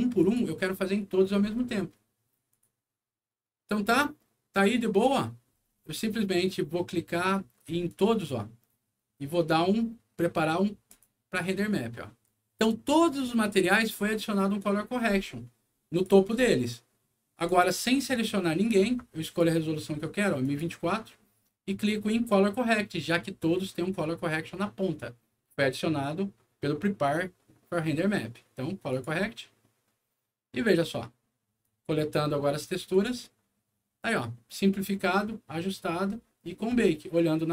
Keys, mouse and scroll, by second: 0.1 click, 2.4 click, 2.8 middle click, 3.5 scroll down 2, 3.9 middle click, 7.8 click, 10.8 click, 12.7 middle click, 15.9 click, 17.3 click, 19.2 click, 20.4 click, 28.8 click, 31.6 click, 32.9 click, 37.4 click.